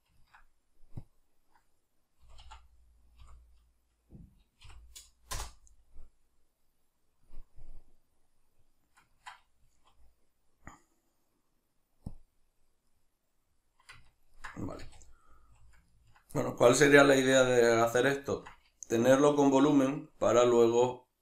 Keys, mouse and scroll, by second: 1.1-8.3 drag, 8.3-12.1 middle drag, 9.7 z, 12.1-12.9 drag, 12.9-21.2 middle drag, 14.7 a.